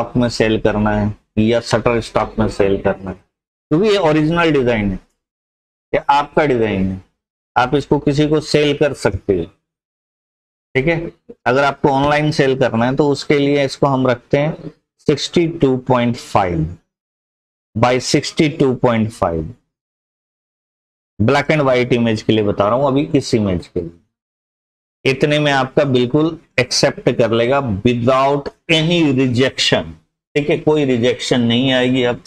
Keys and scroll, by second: 14.7-16.4 typing, 18.9 Tab, 19.7-22.1 typing, 23.4-24.2 typing.